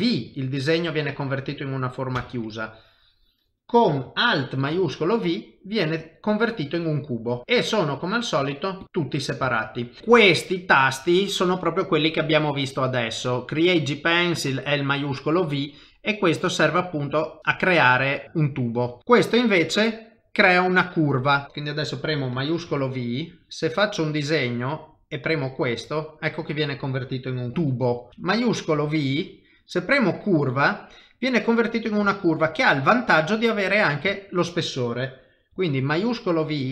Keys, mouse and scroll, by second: 0.3 middle click, 2.2 shift+v, 2.7 click, 4.7 shift+v, 5.4 middle click, 9.5 shift+middle click, 10.0 click, 21.4 shift+middle click, 22.7 shift+v, 23.3 click, 28.3 click, 31.1 middle click, 32.1 shift+middle click, 33.5 middle click, 34.1 shift+middle click, 35.8 shift+v, 36.5 click.